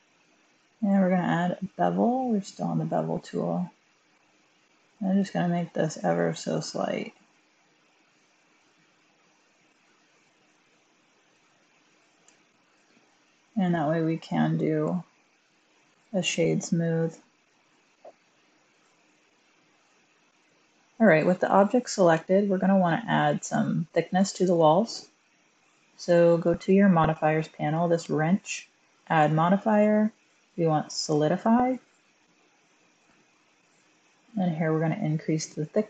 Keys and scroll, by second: 11.2 1, 11.3 Tab, 12.1 Tab, 14.6 typing, 14.7 Tab, 19.3 Tab, 20.6 1, 22.0 1, 24.4 1, 32.5 typing.